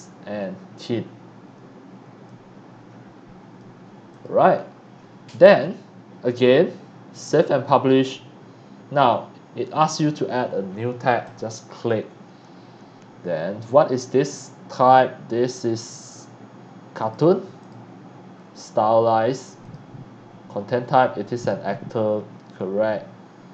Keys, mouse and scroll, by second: 2.3 click, 4.1 click, 7.2 click, 8.2 scroll down 1, 11.2 click, 13.2-13.5 scroll down 1, 15.8 click, 17.0 click, 17.6-19.7 drag, 20.6-21.3 scroll up 1, 21.3 click, 21.9 scroll down 1, 22.6 middle click, 22.6 scroll down 1.